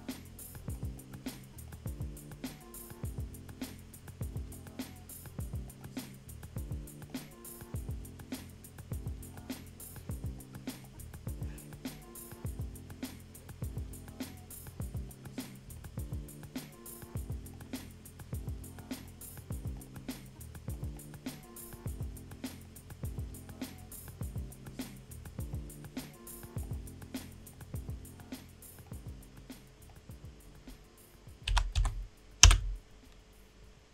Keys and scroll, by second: 31.5-32.6 typing.